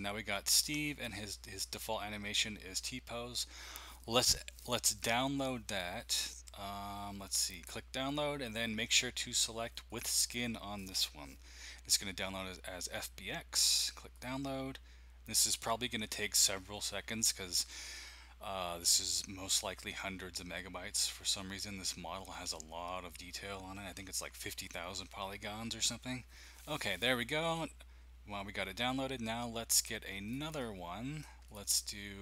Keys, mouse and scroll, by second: 4.9 click, 8.8 click, 9.9 click, 14.1-17.5 drag, 30.2 click, 30.4 click, 31.4 click.